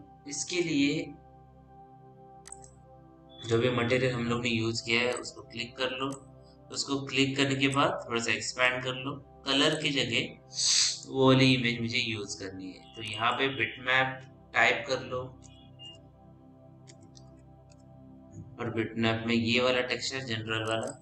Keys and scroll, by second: 3.9 m, 15.7-17.9 typing.